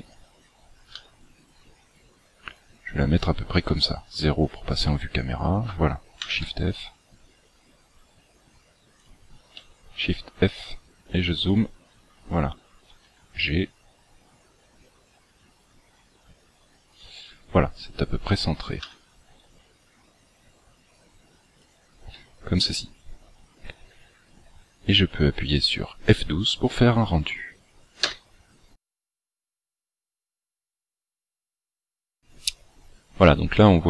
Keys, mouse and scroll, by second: 0.9 g, 3.6 KP_0, 6.2 shift+f, 9.8 shift+f, 13.0 g, 18.8 g, 24.5-25.1 scroll up 2, 25.1 scroll down 1.